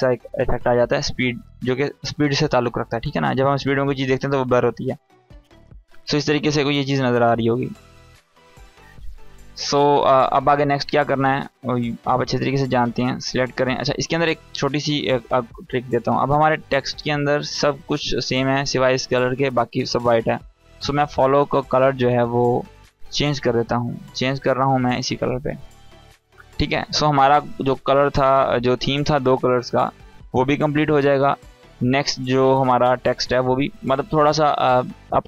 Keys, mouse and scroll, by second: 9.9 space, 11.0-11.6 drag, 17.4 scroll up 1, 20.4 click, 23.7-30.2 drag, 30.4 scroll down 1, 33.7 scroll up 1, 33.9-34.2 scroll down 1.